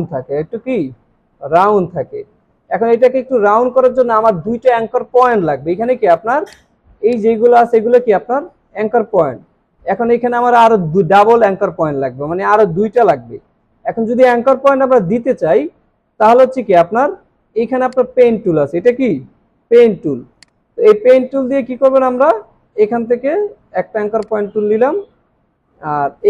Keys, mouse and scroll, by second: 17.9 right click.